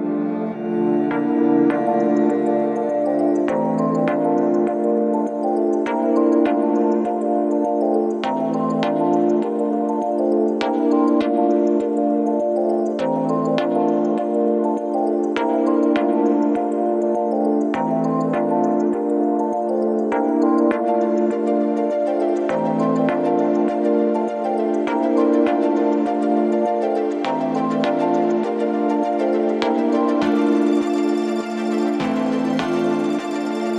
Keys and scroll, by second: 18.0 7, 22.9 4, 24.9 F9.